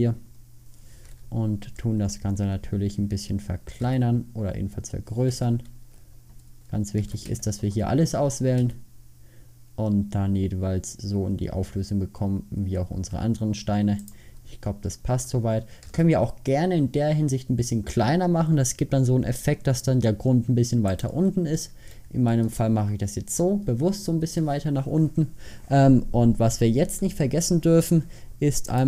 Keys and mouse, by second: 4.0 s, 7.2 a, 7.5 a, 8.7 s, 16.0 s, 22.7 middle click, 23.0 middle click, 23.6 middle click, 24.6 middle click, 24.8 middle click, 26.2 middle click.